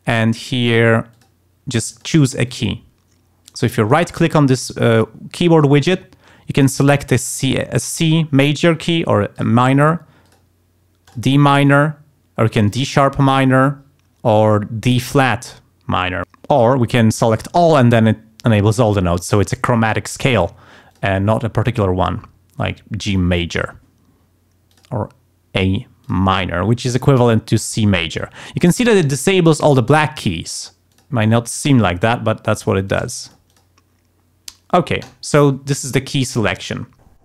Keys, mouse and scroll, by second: 1.1 click, 1.9 click, 2.5 click, 3.5 right click, 3.9 right click, 7.9 click, 9.3 click, 10.2 click, 11.1 click, 12.7 click, 14.8 click, 20.9 click, 24.7 click, 26.0 click, 30.9 click, 32.5 click, 32.9 click, 33.2 click, 35.0 click.